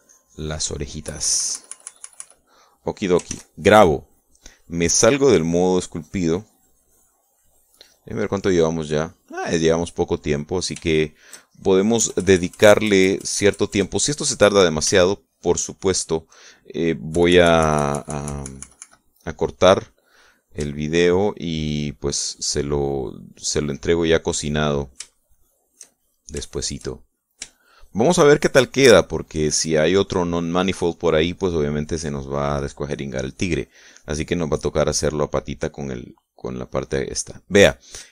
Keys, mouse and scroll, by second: 2.2 KP_Subtract, 4.4 ctrl+s, 4.7 ctrl+click, 6.8 click, 7.2 click, 7.6 click, 9.2 click, 10.2 click, 11.2 middle click, 13.1 KP_Add, 15.4-16.8 middle drag, 18.2 KP_Subtract, 20.6-21.6 drag, 22.2-23.4 shift+drag, 23.5-25.0 shift+drag, 25.0-26.1 middle drag, 26.1 shift+click, 26.3 shift+middle click, 27.0 shift+click, 27.2 shift+middle click, 27.6 shift+click, 28.2 shift+middle click, 28.6 shift+click, 28.7 shift+middle click.